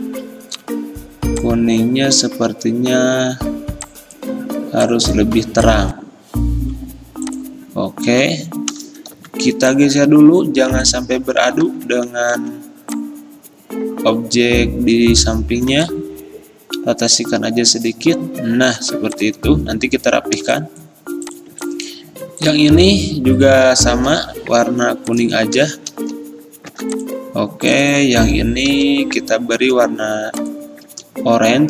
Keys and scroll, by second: 9.2 r, 11.7 ctrl+z, 12.5 v, 15.8 r, 18.9 v, 24.2 i, 25.8 x, 26.8 v, 28.8 i.